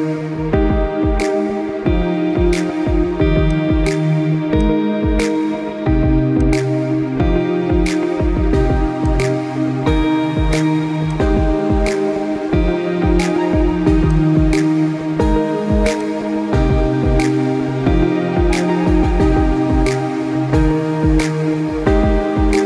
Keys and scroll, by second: 5.1 Delete, 7.0 ctrl+j, 20.0 ctrl+=, 20.1 ctrl+=.